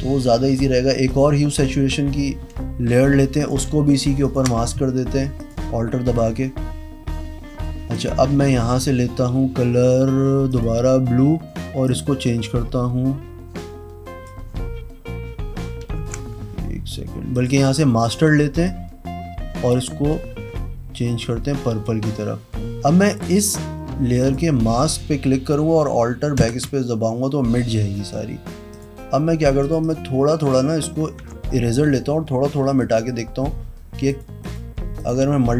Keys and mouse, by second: 1.0 click, 3.4 alt+click, 4.2 alt+click, 5.3 click, 7.9 click, 10.4 click, 11.8 click, 15.9 ctrl+z, 17.3 click, 18.0 click, 18.6-21.8 drag, 24.2 click, 26.3 alt+BackSpace, 28.7 click, 29.6 click, 29.8 click, 31.1 w, 32.6 [, 33.0 click, 33.8 ], 34.1 click, 34.4 click, 34.9 click.